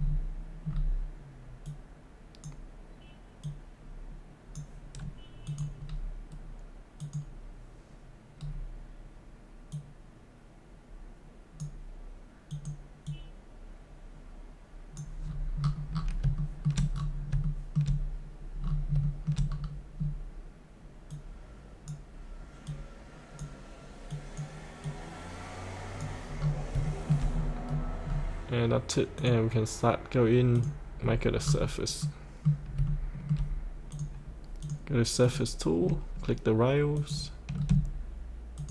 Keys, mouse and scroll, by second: 1.6-4.7 drag, 5.8-6.9 scroll down 1, 6.9 click, 8.4-9.7 scroll down 1, 9.7-15.2 drag, 15.2-16.2 scroll up 1, 16.3 shift+middle click, 16.9-17.3 scroll up 1, 17.4 shift+middle click, 18.6-18.9 scroll down 1, 19.0 shift+middle click, 19.5-21.0 scroll down 1, 21.0-26.0 drag, 26.3 scroll up 1, 26.9 shift+middle click, 27.4 scroll up 1, 29.1 click, 30.9 scroll up 1, 32.0 middle click, 32.1-32.7 scroll up 1, 32.8 shift+middle click, 33.9 click, 35.8-36.9 scroll down 1, 36.9 click, 37.5 scroll down 1, 38.5 ctrl+click.